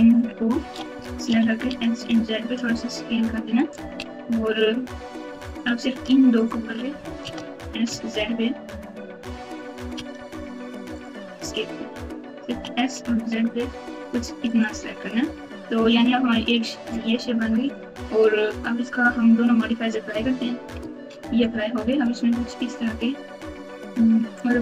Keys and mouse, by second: 1.2 s, 5.4 alt+click, 6.4 alt+click, 7.2 s, 12.4 s, 15.3 Tab, 20.5 ctrl+a, 20.7 ctrl+a, 21.8 Tab, 24.3 click, 24.5 Tab.